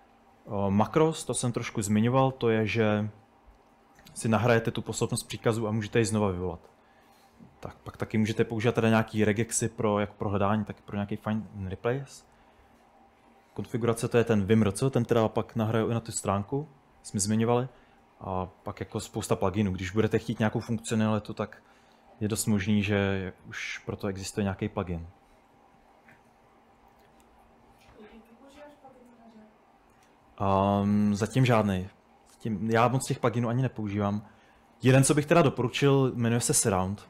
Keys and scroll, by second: 36.2-36.9 typing.